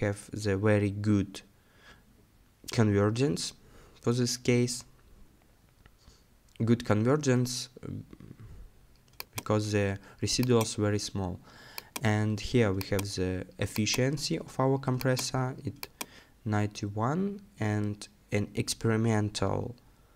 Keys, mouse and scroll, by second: 8.0-10.1 scroll down 1.